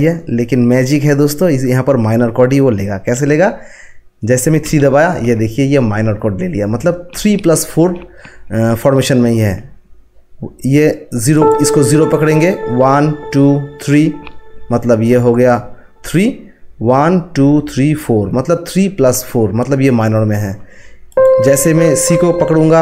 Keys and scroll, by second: 4.6 3.